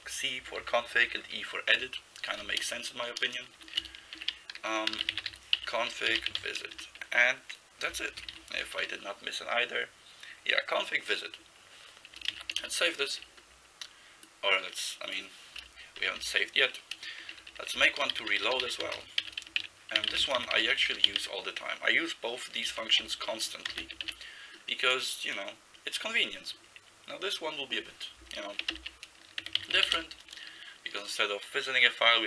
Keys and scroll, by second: 0.1 Left, 0.4 Left, 0.6 Left, 1.0 Right, 1.2 Right, 1.3 Right, 1.8 Right, 2.6-7.3 typing, 8.2 Left, 8.3 Left, 8.8 i, 12.4 ctrl+c, 12.6 ', 16.0 Down, 16.2 Down, 17.4-21.7 typing, 23.1 ctrl+n, 23.7 ctrl+c, 24.0 ', 28.8-30.4 typing.